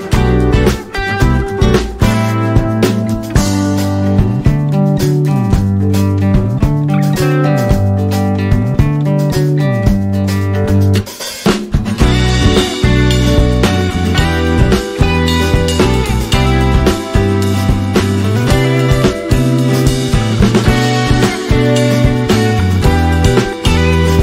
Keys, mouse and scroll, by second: 0.0-0.4 typing, 2.9 click, 3.3 scroll down 1, 5.0 click, 11.1 click, 13.1 click, 14.0 scroll up 1, 14.9 alt+scroll up 1, 15.6 click, 15.9 right click, 17.6 click, 18.5 alt+scroll down 1, 19.2 space, 19.3 click, 19.6 space, 20.6 click, 22.0 click.